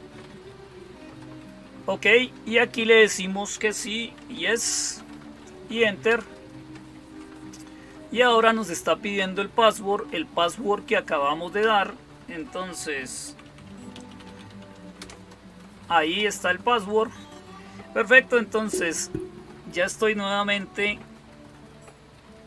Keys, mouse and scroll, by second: 3.9-6.0 typing, 12.7-14.9 typing.